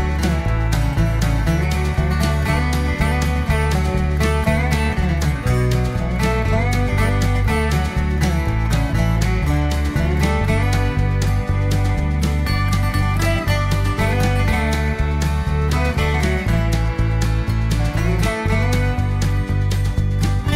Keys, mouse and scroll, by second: 0.5 click, 1.5 click, 2.7 click, 6.6 click, 8.3 click, 9.6 v, 10.5 click, 11.7 click, 12.9 click, 14.2 shift+8, 15.2 p, 15.5 i, 18.3 shift+8, 19.6-20.5 typing.